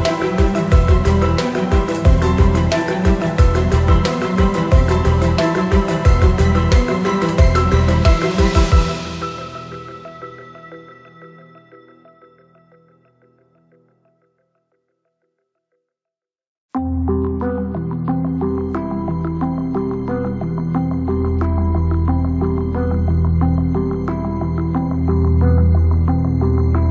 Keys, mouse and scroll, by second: 0.5 shift+click, 2.6 r, 6.6 shift+click, 7.1 KP_7, 9.5 shift+d, 11.7 shift+d, 13.4 shift+d, 15.1 shift+d, 17.3 shift+d, 20.1 shift+d, 22.5 shift+d, 25.6 middle click.